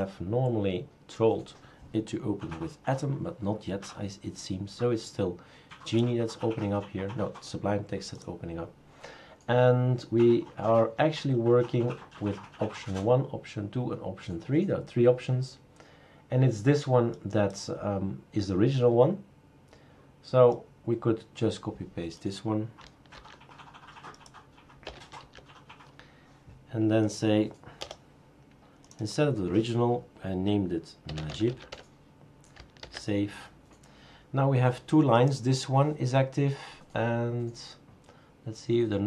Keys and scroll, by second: 23.1 ctrl+c, 24.8 Return, 25.2 ctrl+v, 27.8 BackSpace, 30.8-32.2 typing, 32.8 ctrl+s.